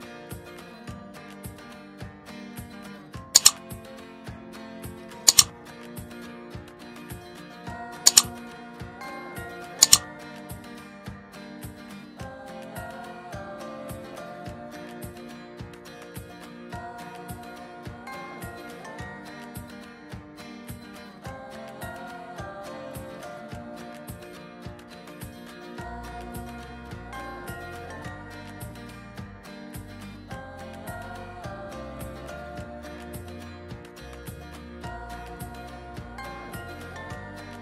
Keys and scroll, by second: 17.1 ctrl+j, 17.9 ctrl+j.